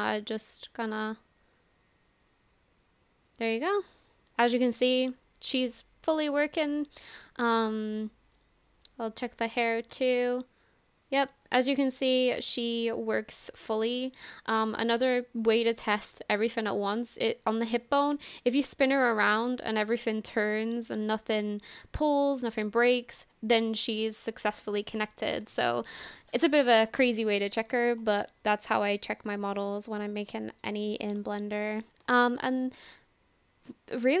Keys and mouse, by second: 0.0 shift+click, 0.9-3.9 shift+drag, 4.7 shift+middle click, 5.1-6.3 middle drag, 6.8 middle click, 7.4 shift+middle click, 8.2 click, 10.2-11.7 shift+drag, 12.3-13.5 middle drag, 14.0 shift+middle click, 14.4 middle click, 15.2-15.5 shift+middle drag, 18.2-23.6 drag, 24.8-25.2 middle drag, 25.6 shift+middle click, 27.2 middle click, 29.5 click, 31.4 shift+drag, 32.2 shift+click, 34.1 click.